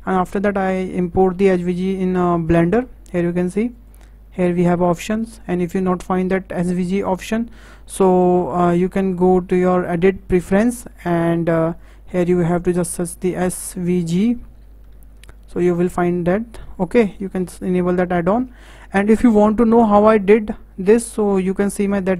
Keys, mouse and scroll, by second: 1.7-4.9 drag, 9.2-12.3 drag.